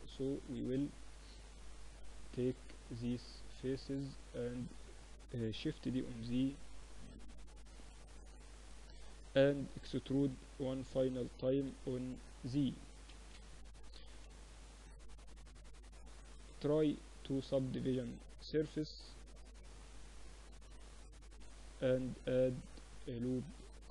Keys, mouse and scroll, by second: 1.5 click, 2.2-3.5 middle drag, 3.5-5.7 drag, 5.7 shift+d, 7.1 p, 7.8 Tab, 8.3-10.1 drag, 8.7 Tab, 9.1 a, 10.1 e, 12.4 Tab, 13.5 KP_1, 13.8 KP_3, 16.7 ctrl+2, 19.8 Tab, 21.1 ctrl+r, 22.8 ctrl+r.